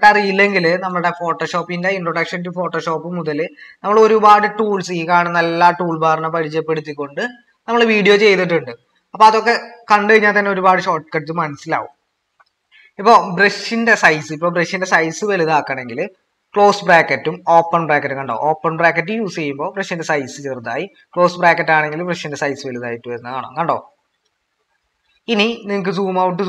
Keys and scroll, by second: 16.2-23.5 typing, 25.6-26.4 typing.